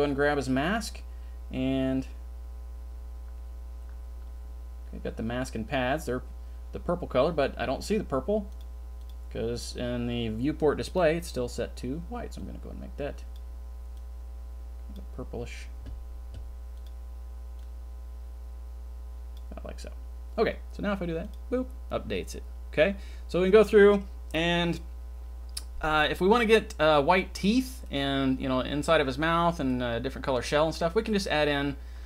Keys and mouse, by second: 8.5 click, 9.0 click, 10.9 click, 21.2 click, 26.7-27.4 drag, 27.8-28.8 middle drag, 29.7-30.3 middle drag.